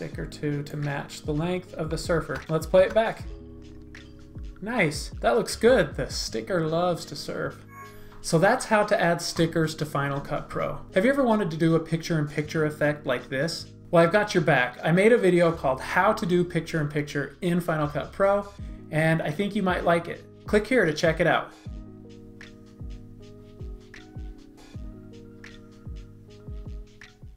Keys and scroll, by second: 2.8 space, 5.1 space.